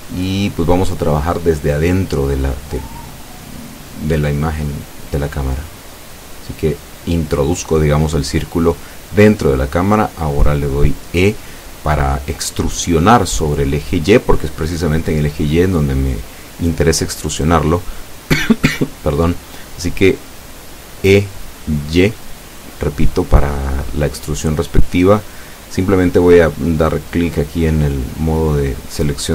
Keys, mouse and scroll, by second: 2.3 click, 3.3-7.0 drag, 9.8-11.8 middle drag, 12.3 scroll up 1, 13.8-16.2 drag, 25.8 Tab, 26.5 Tab, 27.5-29.3 drag.